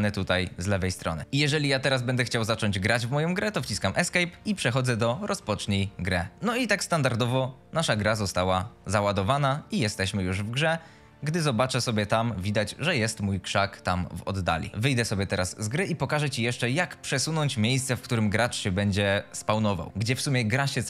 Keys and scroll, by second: 0.0-1.2 typing, 3.5 Escape, 9.2 w, 14.7 Escape.